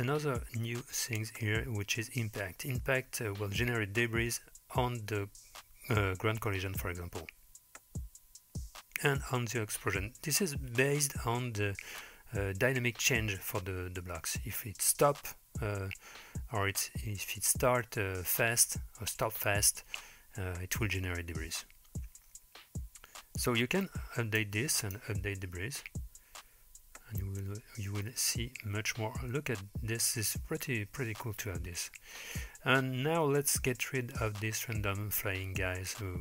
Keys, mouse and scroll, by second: 23.5-24.4 drag, 24.8-25.2 drag, 34.7 middle click.